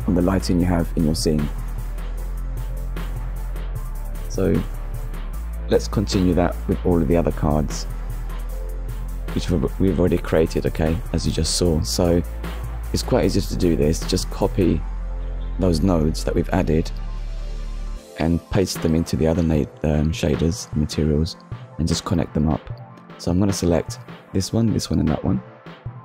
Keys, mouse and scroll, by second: 0.6 click, 1.3 KP_0, 1.5 Return, 3.5 middle click, 5.1 middle click, 6.0 middle click, 7.2 middle click, 8.7 scroll up 1, 10.5 shift+middle click, 11.6 shift+middle click, 14.2 click, 15.0 KP_Decimal, 15.3 KP_5, 15.5 Return, 16.9 scroll down 1, 17.7 middle click, 18.9-19.3 scroll down 1, 20.1 middle click, 21.3-21.7 scroll down 1, 22.0 shift+middle click, 23.2 middle click, 24.2 scroll up 1, 24.9 click, 25.1 shift+click, 25.4 shift+click, 25.7 ctrl+c.